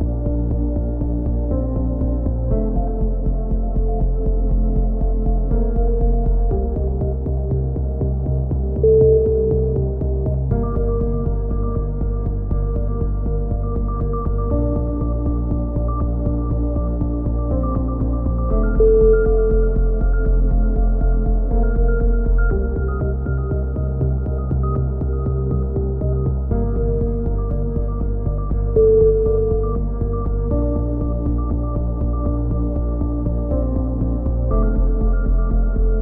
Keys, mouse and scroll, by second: 0.6-3.9 middle drag, 3.9 KP_3, 4.2 middle click, 4.2 z, 4.9 click, 5.8 middle click, 7.0 z, 7.4 z, 8.5 z, 8.8 z, 9.5 z, 10.2 ctrl+z, 10.4 ctrl+z, 11.2 c, 12.1 click, 12.3 z, 13.0-15.6 drag, 15.3 a, 18.6 click, 19.8 click, 22.3-24.3 drag, 24.3 a, 24.4 middle click, 25.2 click, 25.7-27.6 middle drag, 28.3 click, 28.9 ctrl+l, 29.2 x, 30.0-31.1 drag, 32.5 middle click, 33.4 click, 34.4 right click, 34.5 KP_3, 34.8 z, 35.9 click.